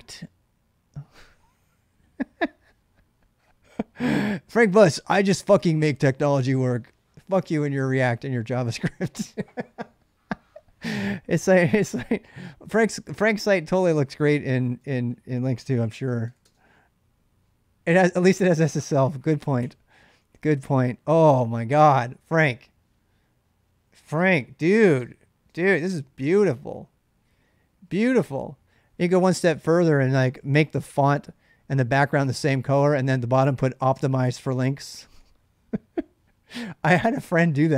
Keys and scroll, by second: 15.2-16.6 typing, 19.4 Return, 24.8 space, 25.3 space, 27.7 space, 27.7 k, 32.6 k, 32.8 k, 35.0 k.